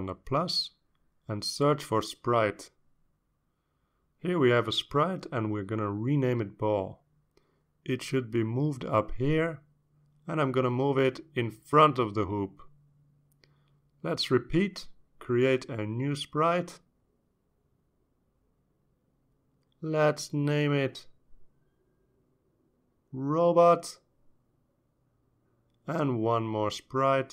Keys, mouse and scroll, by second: 1.0 click, 3.8 click, 5.2 click, 6.2-7.5 typing, 7.5 Return, 8.8 click, 9.8 click, 11.7-13.4 drag, 14.8 click, 17.5 click, 22.2 click, 23.7-25.1 typing, 25.8 Return.